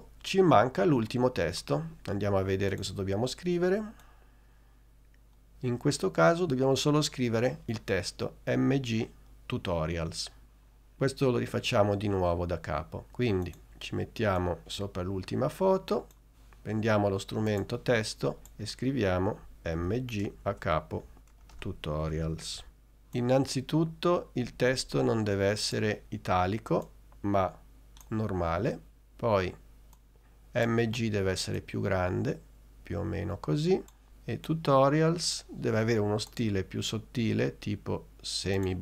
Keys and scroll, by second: 19.5 shift+m, 19.9 shift+g, 20.6 shift+Return, 21.0-22.9 typing.